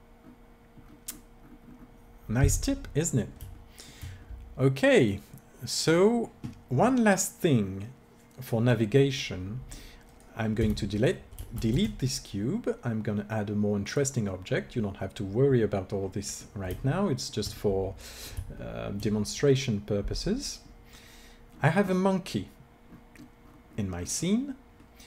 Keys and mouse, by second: 10.1-13.8 drag, 10.7 x, 11.6 shift+a, 15.3-17.9 middle drag, 18.6-20.3 middle drag, 20.3-21.5 drag.